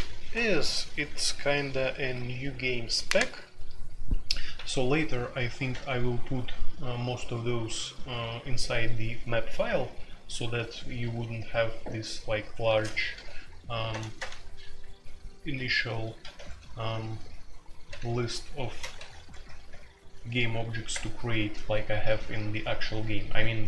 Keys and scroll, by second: 12.6-14.1 typing, 16.2-16.9 typing, 18.0-19.6 typing, 20.9 Return.